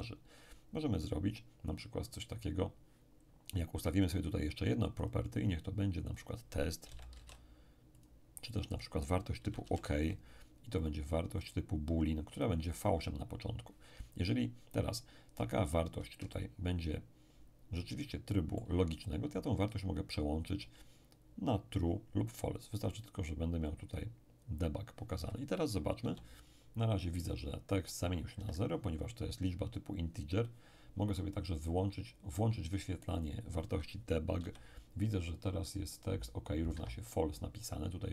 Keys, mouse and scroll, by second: 5.0 click, 6.2 click, 6.6-8.0 typing, 8.0 click, 9.2-10.1 typing, 10.1-12.4 drag, 16.3-19.5 ctrl+middle drag, 22.9 click, 26.0 p, 28.4 Escape, 31.5 click, 33.2 click, 34.4 p, 36.7 Escape.